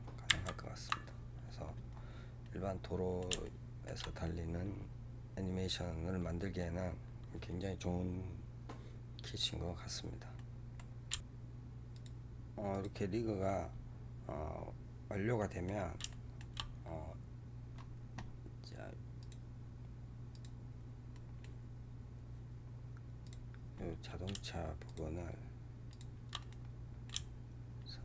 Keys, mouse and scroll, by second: 0.3 ctrl+z, 1.0-1.8 scroll down 3, 1.8-2.3 scroll down 3, 2.3-4.0 middle drag, 4.0-6.5 scroll up 24, 10.2 middle click, 11.1-14.5 drag, 14.5 scroll down 3, 15.3-16.5 middle drag, 16.5-16.8 scroll up 2, 21.0-22.6 middle drag, 22.6-23.2 scroll up 2, 26.3-28.0 middle drag.